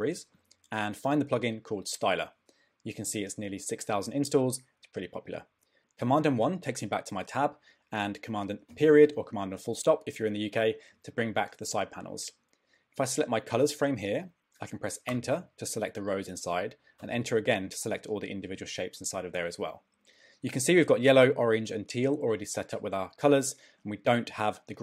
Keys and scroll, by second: 6.0 super+1, 8.7 super+., 15.1 Return.